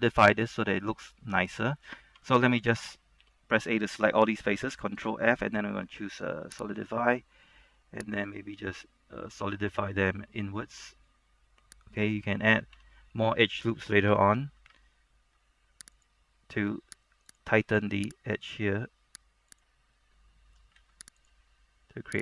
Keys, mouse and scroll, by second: 0.3 middle click, 2.3 Tab, 3.3 a, 4.9 ctrl+f, 6.9-12.8 drag, 12.8 Tab, 15.4 ctrl+r, 16.1 click, 17.9 ctrl+r, 18.4 click, 20.1 middle click, 20.8 ctrl+r, 21.3 click.